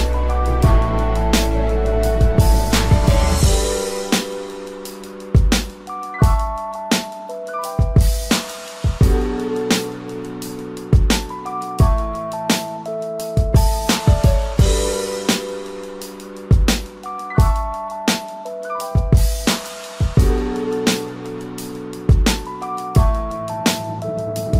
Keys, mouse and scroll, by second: 3.5 ctrl+t, 5.8 alt+shift+click, 9.0 alt+shift+click, 11.6 Return, 18.7 ctrl+t, 19.7 alt+shift+click.